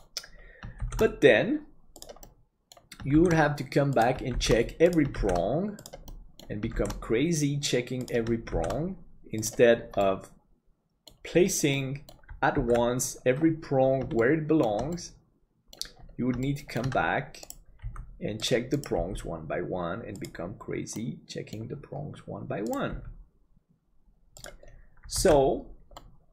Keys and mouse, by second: 0.9 shift+d, 2.3 middle click, 4.5 shift+d, 6.2 middle click, 10.0-11.1 middle drag, 11.8 middle click, 12.9 ctrl+s, 14.3 shift+middle click, 15.0 middle click, 16.5 shift+middle click, 17.8 g, 19.0 g, 21.1 middle click, 22.9 g, 25.4 ctrl+s, 25.9-26.3 middle drag.